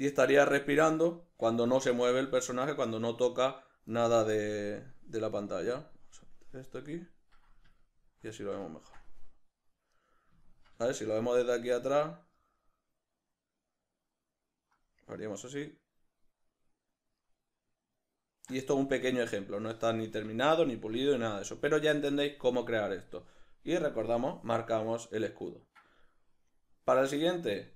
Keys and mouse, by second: 4.6 click, 5.4-5.7 drag, 6.2 drag, 7.8-8.8 middle drag, 20.1 Escape, 24.0-27.1 drag.